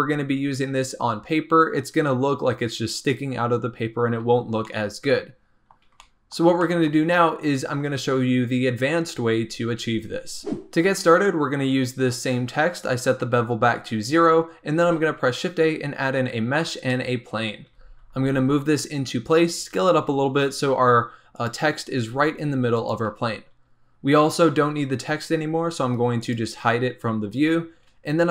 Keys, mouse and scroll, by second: 4.3-4.6 scroll down 2, 4.6-9.6 middle drag, 10.4-11.8 shift+middle drag, 14.8 shift+a, 17.4 scroll down 2, 17.7 g, 19.3 s, 19.9 g, 22.0 g, 26.2 click, 27.8-28.3 scroll up 1.